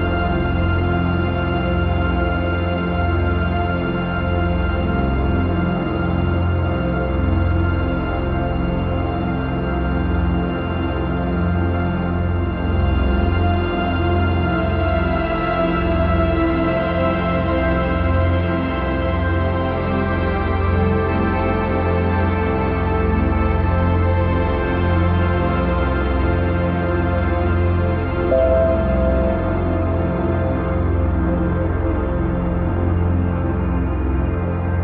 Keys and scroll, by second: 8.2 ctrl+j, 10.8 ctrl+t, 16.1 ctrl+=, 22.9 ctrl+0, 23.8 ctrl+=, 24.4 ctrl+-, 25.3 ctrl+a, 27.2 ctrl+d, 27.9 ctrl+=.